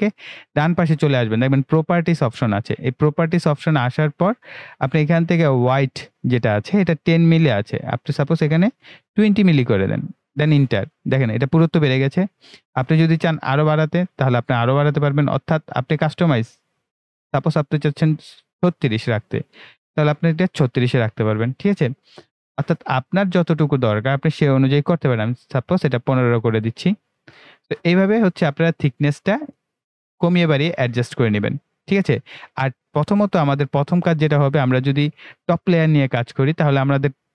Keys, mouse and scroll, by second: 6.9 click, 13.5-16.9 drag, 22.5-26.4 drag, 27.6 click, 29.9-30.3 ctrl+scroll down 1, 33.9-37.3 right drag.